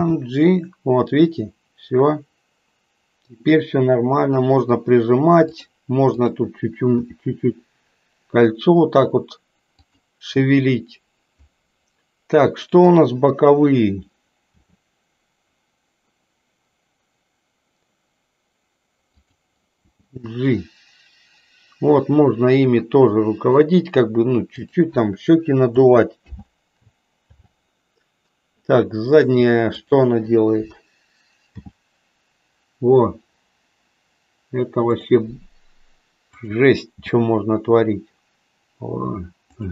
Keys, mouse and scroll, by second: 6.1 click, 7.1 r, 12.6 click, 14.5 r, 19.9 g, 26.2 alt+g, 27.2 alt+r, 31.5 g, 37.0 g.